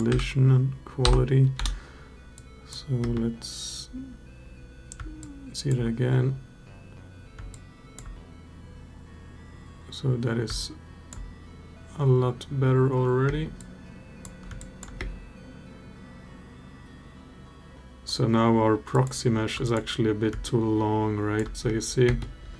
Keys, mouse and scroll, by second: 2.1-2.5 drag, 2.8 space, 5.1-5.6 alt+drag, 7.4-7.9 alt+drag, 10.4-11.1 alt+drag, 13.0 space, 13.4-14.0 drag, 14.3 alt+drag, 14.7 space, 17.8 drag, 18.7 click, 19.4 click, 20.2-21.2 alt+drag, 21.4 space, 21.8 space.